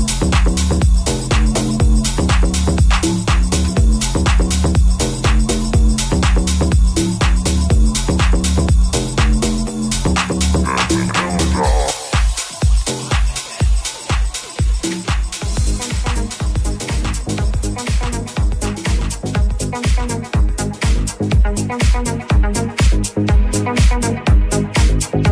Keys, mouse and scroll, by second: 0.0-12.3 middle drag, 1.4 Tab, 1.7 right click, 12.3 Tab, 12.9 3, 13.9-22.8 ctrl+middle drag.